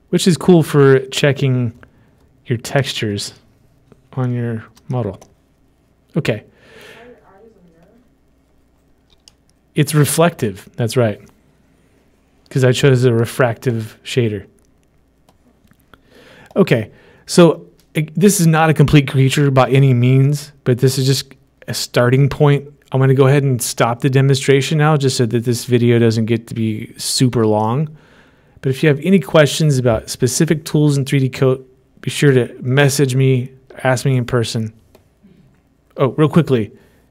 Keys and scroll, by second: 9.6-10.3 typing.